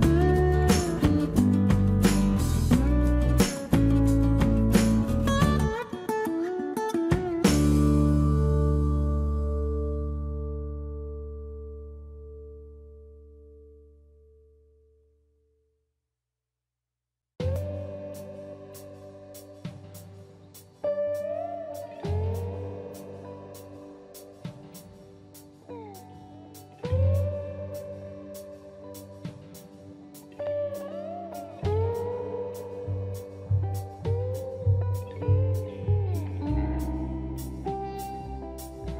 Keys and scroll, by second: 1.5 space, 4.1 Escape, 7.7 space, 17.9 Delete, 18.6 space, 19.0 Delete, 19.7 Delete, 21.2 space, 22.6 space, 34.9 space.